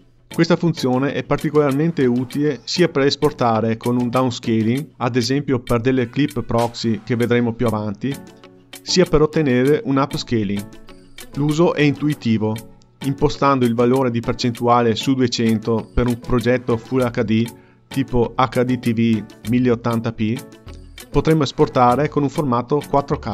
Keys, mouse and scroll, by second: 0.8 click, 2.9-4.2 drag, 5.3 click, 6.2 click, 12.0-13.2 drag, 14.9 click, 16.2-17.9 scroll down 1, 20.9 click, 21.5 KP_0, 22.6 click.